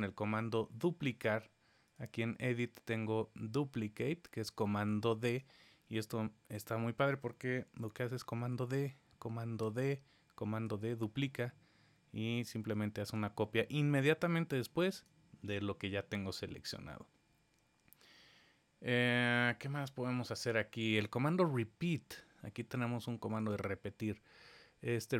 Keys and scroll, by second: 8.5 super+d, 9.6 super+d, 12.2 super+z, 12.6 super+z.